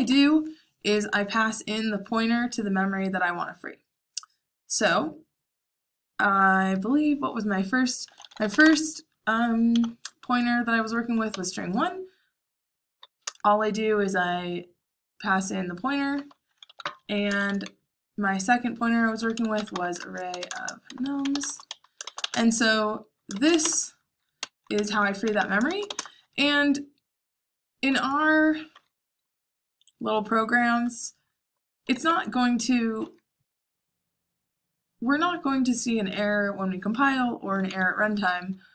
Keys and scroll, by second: 0.0-1.9 typing, 7.8-11.2 typing, 13.2 Return, 16.1-17.8 typing, 18.9-21.3 typing, 23.0-26.3 typing, 31.5-32.3 typing, 37.4-38.1 typing.